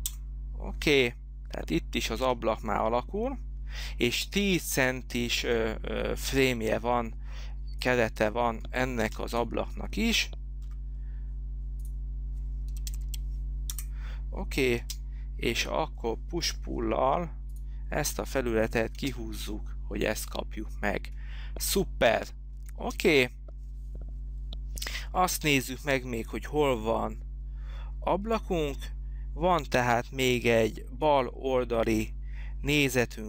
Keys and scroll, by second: 0.3 Return, 9.2 space, 10.8 f, 12.6-13.5 typing, 13.9 Return, 15.1 space, 16.7 p, 19.3 space, 23.0 space.